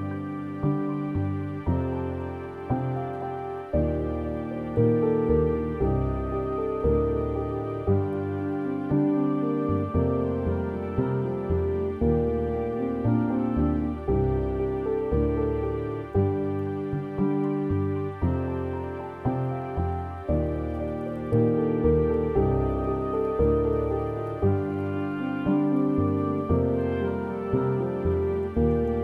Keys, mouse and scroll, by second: 1.1 scroll down 2, 1.3 middle click, 2.1-2.7 scroll down 3, 2.7 middle click, 2.9 scroll down 3, 3.1-3.6 scroll up 7, 3.6 middle click, 4.1-4.6 scroll down 8, 4.6-5.1 scroll up 8, 5.1-6.9 middle drag, 6.9-26.4 drag, 26.4-27.8 middle drag, 27.8-28.1 scroll down 3, 28.1-28.5 scroll up 4, 28.5 middle click.